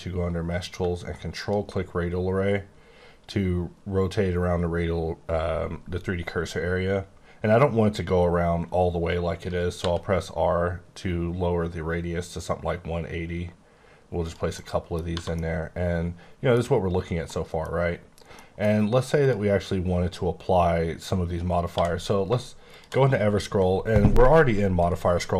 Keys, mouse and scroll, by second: 1.4 ctrl+click, 2.6 scroll down 3, 3.8-5.6 scroll up 1, 6.2-6.5 scroll down 1, 6.5-7.6 scroll up 2, 7.6-8.2 scroll up 1, 8.2-9.0 scroll up 1, 9.0-9.8 scroll down 3, 9.8 r, 10.5-11.1 scroll down 2, 11.1 scroll up 1, 12.0-13.0 scroll up 1, 13.0-14.2 scroll down 2, 14.2 click, 14.8 middle click, 15.1 1, 15.3 middle click, 17.3 middle click, 17.7 scroll up 1, 18.3 middle click, 21.7 q, 22.6 click.